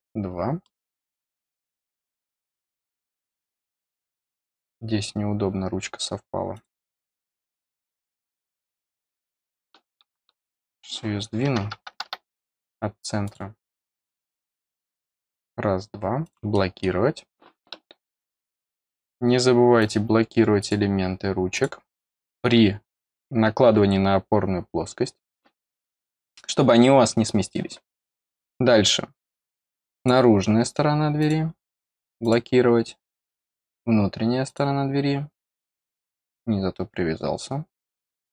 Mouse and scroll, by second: 0.6 middle click, 2.0-2.3 scroll up 2, 2.3 scroll down 2, 5.8 scroll down 2, 6.5 click, 8.0 click, 9.1 click, 10.6 click, 13.2 click, 14.2 click, 15.0 click, 16.2 click, 16.5 middle click, 19.7 click, 20.5 click, 21.5 click, 29.9 click, 31.1 click, 32.2 click, 33.4 click, 34.4-35.8 drag, 37.7 click.